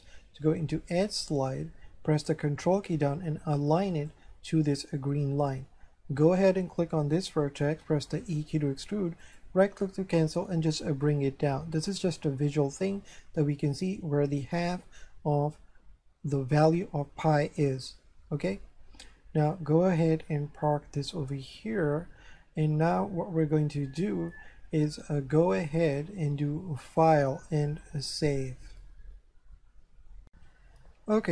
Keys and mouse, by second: 3.9 ctrl+click, 6.2 right click, 8.1 e, 9.2 right click, 10.5 click, 12.9 Tab, 18.5 shift+middle click, 26.9 click, 28.1 click, 30.3 click, 30.4 F3.